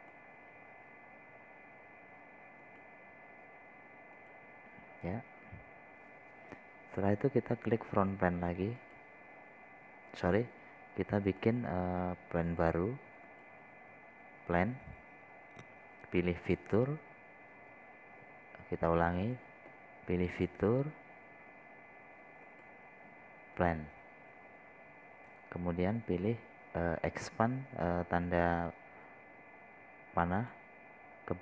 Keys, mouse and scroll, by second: 0.6 scroll down 1, 1.4-5.1 drag, 5.8 click, 6.3 scroll down 1, 6.8 scroll up 1, 7.7 scroll down 1, 10.2-31.4 drag.